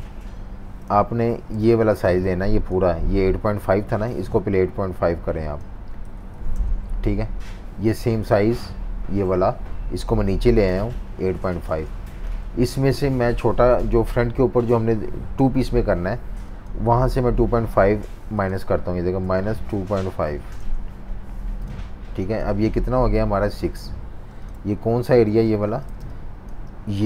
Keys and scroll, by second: 0.3 v, 0.8 super+-, 1.0 super+-, 1.6 space, 5.8-7.2 typing, 11.7 z, 12.4 v, 18.9-20.7 typing, 25.2 super+-, 25.3 super+-, 26.0 space, 26.5 space.